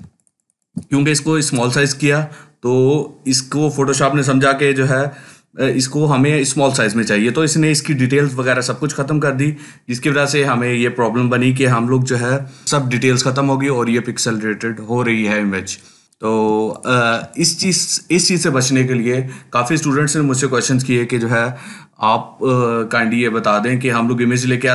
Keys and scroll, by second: 16.3 ctrl+space, 16.9 ctrl+space.